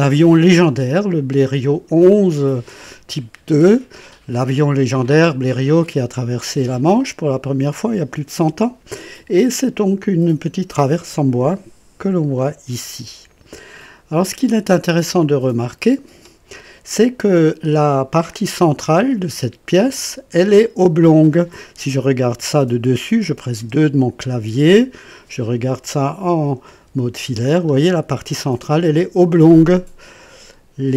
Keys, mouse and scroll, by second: 9.3-9.8 scroll down 2, 12.5 scroll down 2, 15.2 click, 18.2-20.3 drag, 20.8 click, 23.6 KP_2, 24.2-24.5 scroll up 1, 24.9 right click, 26.8-27.4 typing, 27.4 scroll up 1.